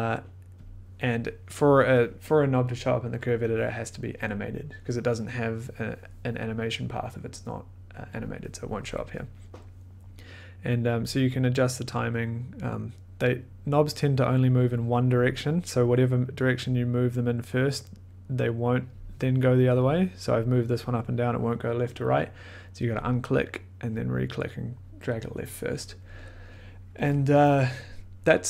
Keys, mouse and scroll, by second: 0.6 click, 11.5 click, 12.8-15.3 drag, 22.8 click, 23.5-25.7 drag.